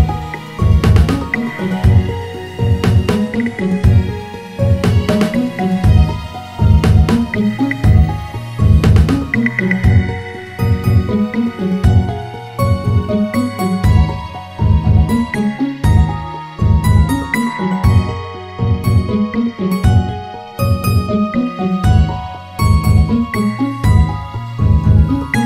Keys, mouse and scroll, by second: 3.5 shift+a, 16.7-21.3 drag, 23.3-24.7 scroll up 3, 24.7 click.